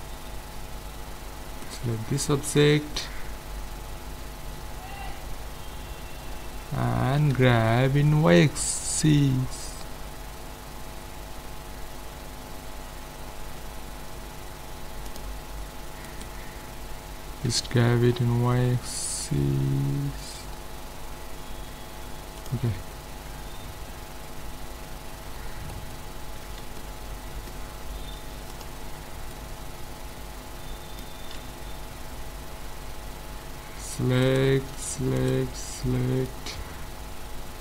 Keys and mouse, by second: 1.7 middle click, 2.3-3.4 right drag, 3.4-5.2 middle drag, 7.2 g, 16.1-17.9 right drag, 17.4 g, 22.7-26.0 middle drag, 26.4 z, 28.2 ctrl+s, 31.4 z, 34.2-36.3 right drag, 36.3 middle click.